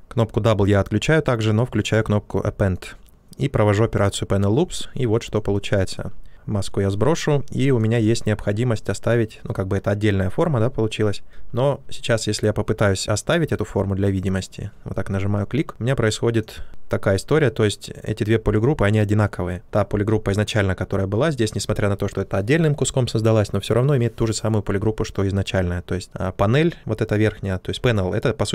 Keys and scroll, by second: 19.6 ctrl+z.